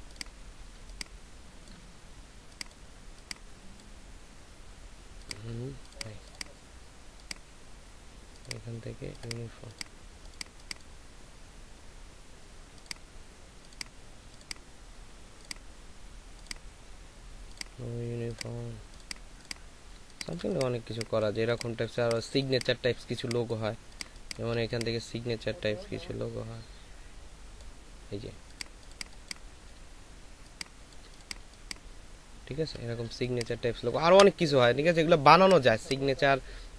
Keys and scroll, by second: 0.7 ctrl+space, 19.9 ctrl+alt+space, 21.8 ctrl+space, 31.5 ctrl+shift+space, 34.1 Delete.